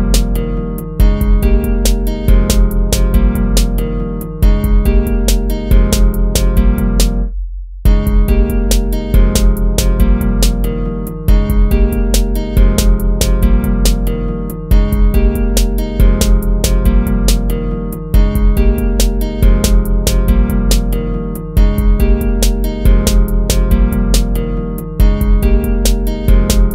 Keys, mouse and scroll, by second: 3.0 ctrl++, 4.8 ctrl+-, 8.1 ctrl++, 9.8 ctrl+z, 10.1 ctrl++, 11.3 ctrl+z, 11.5 ctrl+-.